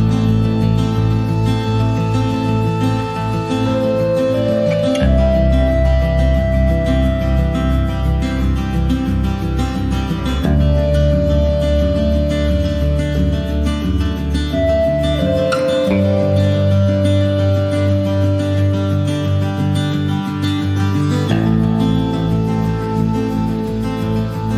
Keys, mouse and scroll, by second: 0.7 click, 0.9 scroll down 4, 1.1-2.6 middle drag, 2.6 click, 2.7 scroll up 3, 3.0-4.4 middle drag, 4.4-6.1 scroll up 10, 6.1 `, 6.5-9.2 middle drag, 9.2-10.6 drag, 19.8 click, 20.3 shift+d.